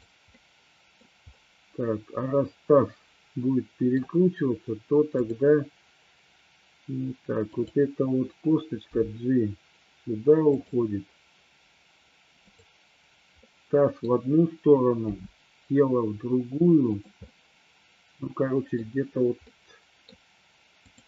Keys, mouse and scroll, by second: 0.4-1.0 middle drag, 0.4 scroll up 1, 1.0-1.4 scroll down 1, 1.4-4.0 middle drag, 1.4 scroll up 1, 5.3 click, 7.5 click, 9.0 g, 10.6 click, 13.5-14.1 middle drag, 15.1 r, 17.0 click, 17.4-18.9 middle drag, 19.5-20.1 middle drag, 20.9 click.